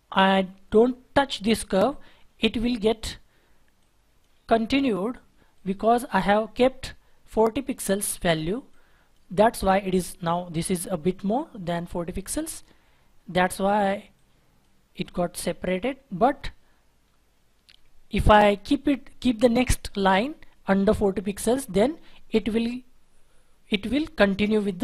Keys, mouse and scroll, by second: 2.1-2.7 scroll down 1, 2.7-3.8 scroll up 1, 9.9-10.3 scroll up 1, 10.3-11.0 scroll down 1, 11.0 scroll up 1, 15.8-16.6 scroll down 1.